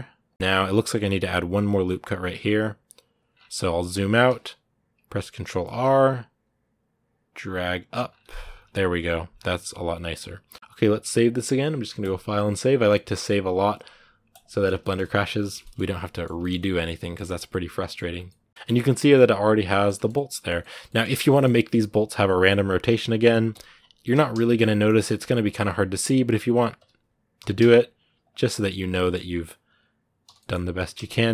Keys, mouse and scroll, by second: 0.3-1.6 middle drag, 1.6 Tab, 3.1 scroll down 2, 4.1 ctrl+z, 7.8 scroll up 2, 8.7 Tab, 9.1 scroll down 2, 9.3 middle click, 10.3 scroll up 1, 10.4 scroll down 1, 14.6 shift+middle click, 15.0 scroll down 2, 15.4 shift+middle click, 15.7 scroll down 1, 15.9-17.9 middle drag, 17.9 scroll up 2, 18.1 middle click, 18.6 scroll up 2, 18.8-19.9 middle drag, 19.9 scroll up 1, 19.9-21.0 middle drag, 21.0 scroll up 1, 21.1 middle click, 21.3 Tab, 21.7 right click, 22.0 scroll up 1, 23.1 right click, 23.3 l, 25.2-26.6 right drag, 26.6 l, 28.3-29.5 middle drag, 29.5 right click, 30.0 l, 30.2 middle click, 30.6 r.